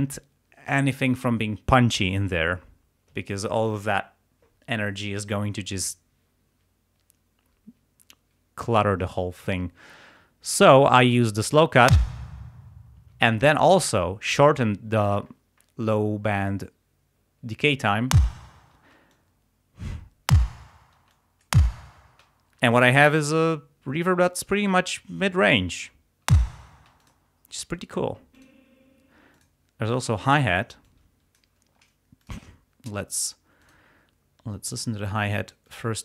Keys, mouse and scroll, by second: 12.0 space, 13.0 space, 13.7 click, 18.2 space, 18.8 space, 19.2 click, 20.4 space, 21.0 space, 21.2 click, 26.4 space, 27.1 click, 28.4 click, 29.4 click, 30.9 click, 32.3 click, 33.7 click, 34.7 click, 35.7-36.0 drag.